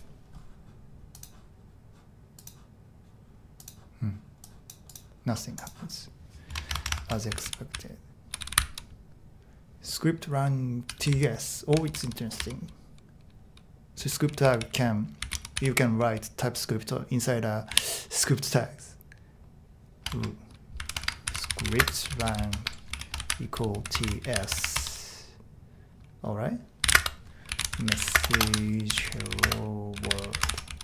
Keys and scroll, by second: 6.5 Tab, 7.0-9.1 typing, 10.6-16.6 typing, 17.7 typing, 20.1 shift+Tab, 20.5-24.8 typing, 26.6-30.8 typing.